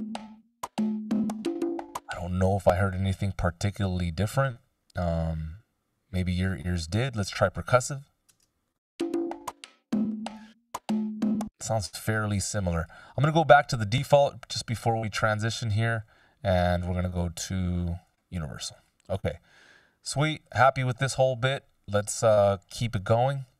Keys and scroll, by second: 1.9 space, 8.7 space, 10.3 space.